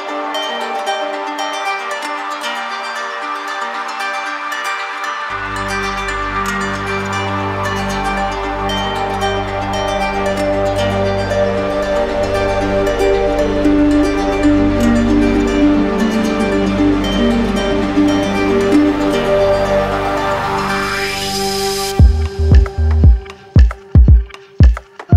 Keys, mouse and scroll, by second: 0.0 ctrl+click, 8.4 ctrl+click, 9.1 alt+right click, 9.7 alt+right click, 11.3 ctrl+click, 12.5 ctrl+click, 14.5 right click, 15.0 shift+right click, 15.9 alt+right click, 16.8 alt+right click, 19.8 ctrl+click, 20.7 ctrl+z, 22.8 ctrl+click, 23.5 alt+right click.